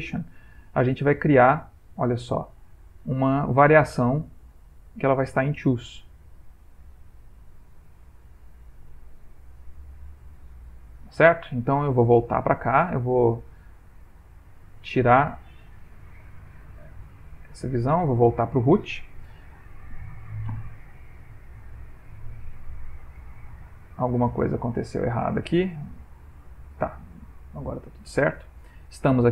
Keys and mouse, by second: 0.5-0.9 middle click, 1.0-1.3 ctrl+middle click, 2.0 middle click, 2.7 ctrl+middle click, 3.2 middle click, 3.7 ctrl+middle click, 5.3 click, 10.0 click, 10.6 middle click, 13.0 Tab, 14.7 ctrl+Tab, 16.0 click, 17.1 click, 20.7 ctrl+Tab, 23.1 ctrl+Tab, 25.7 Tab, 27.3 click, 28.6 middle click.